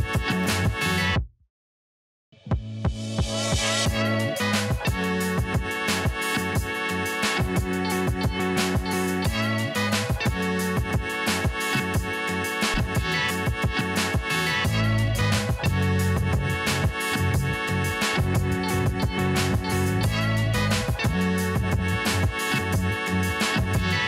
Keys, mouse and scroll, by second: 0.0 ctrl+t, 0.7-4.0 alt+drag, 4.3-4.7 alt+scroll up 1, 5.3 click, 5.5-5.8 alt+scroll down 1, 6.5-7.6 alt+scroll up 1, 8.3 click, 11.7 click, 14.1-17.0 drag, 17.0-22.1 drag.